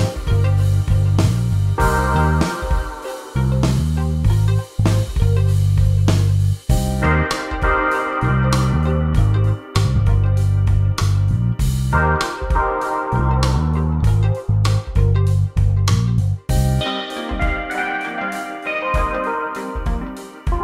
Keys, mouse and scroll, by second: 1.0 click, 7.8 click, 9.3 click, 10.8 click, 17.0 click, 20.0 click.